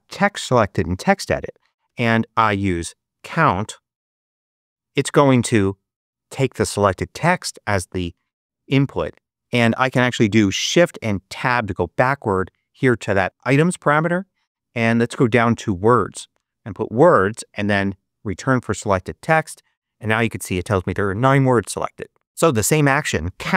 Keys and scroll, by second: 1.8 super+space, 2.2 super+3, 3.2 super+c, 3.2-4.7 typing, 5.0 Return, 11.3 shift+Tab, 14.8 Down, 17.3 Return, 18.3 Return.